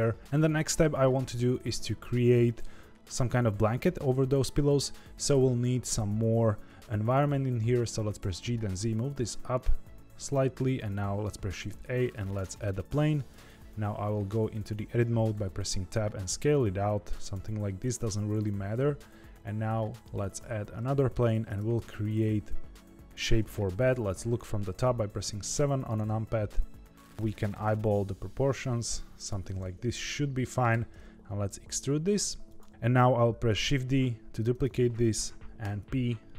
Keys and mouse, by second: 8.1 g, 11.2 shift+a, 13.1 Tab, 15.3 s, 17.7 Tab, 18.7 shift+a, 20.8 middle drag, 21.4 Tab, 21.7 s, 23.8 KP_7, 26.0 s, 27.2 s, 30.0 middle click, 30.7 e, 33.6 shift+d, 35.5 p.